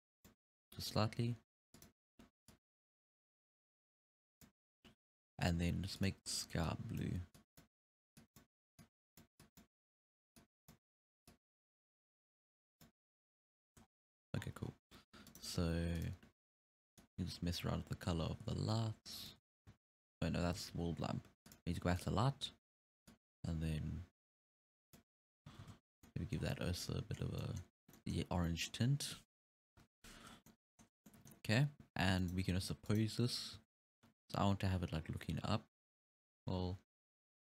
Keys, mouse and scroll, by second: 1.8 click, 2.5 click, 5.4 click, 6.0 click, 6.7 click, 13.6 scroll up 1, 13.9-14.2 scroll down 5, 14.2 alt+a, 14.4 scroll up 6, 14.6 scroll down 1, 14.8-15.3 scroll up 1, 15.3 right click, 16.0 click, 17.0 click, 20.6 ctrl+z, 21.5 click, 22.0 click, 23.1 click, 25.6 alt+a, 25.9 scroll down 6, 26.1-26.4 middle drag, 26.4 scroll up 6, 26.5-27.2 middle drag, 27.2 scroll down 3, 27.4-28.3 middle drag, 28.3 scroll up 1, 28.5-28.9 middle drag, 28.9-29.2 scroll down 1, 29.7 KP_1, 30.3 scroll up 5, 30.5-30.9 middle drag, 30.9 scroll down 4, 31.1-32.2 middle drag, 32.2 right click, 32.6 ctrl+Tab, 32.9 right click, 33.6 r.